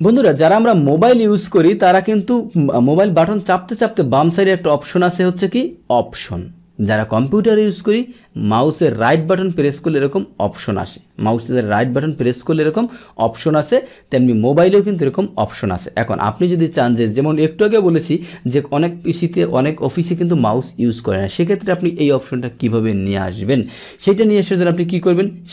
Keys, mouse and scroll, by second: 8.8 right click, 9.9-10.9 right drag, 11.1 right click, 11.7 right click, 12.7 right click, 13.5 click.